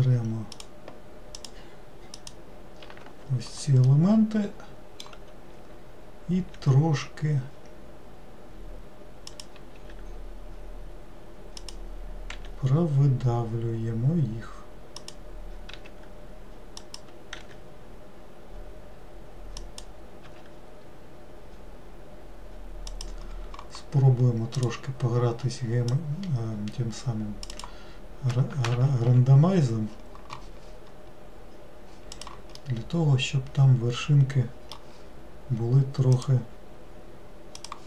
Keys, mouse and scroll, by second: 0.7 ctrl+shift+click, 1.5 ctrl+shift+click, 2.3 ctrl+shift+click, 4.0-6.7 middle drag, 6.7 e, 24.7-27.8 drag, 28.9 ctrl+z, 32.3 click, 32.8-35.9 middle drag.